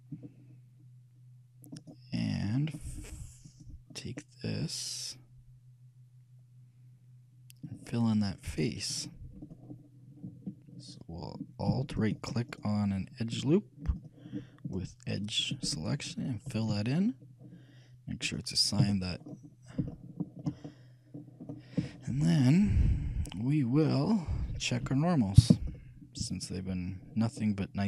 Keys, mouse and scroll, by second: 1.9-6.1 right drag, 2.3 middle click, 4.1-5.2 drag, 6.1 middle click, 8.8-10.8 drag, 12.2-14.4 alt+right drag, 14.1-16.1 alt+drag, 15.5-17.5 alt+right drag, 16.8 f, 18.4-20.2 drag, 19.0 a, 19.5-21.7 middle drag, 21.9-25.3 shift+middle drag, 25.1 n, 26.5-27.8 drag, 27.5-27.8 middle drag.